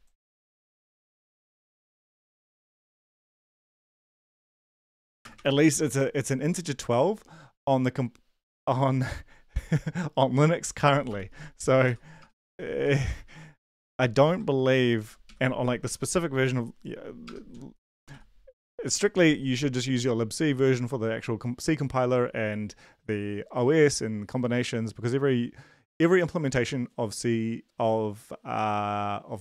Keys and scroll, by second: 1.0 ctrl+c, 2.2 Up, 2.4 End, 2.6 Return, 2.9-5.8 typing, 11.1-15.8 typing, 17.2 BackSpace, 17.5 ., 17.9 BackSpace, 18.1 ,, 18.8 Left.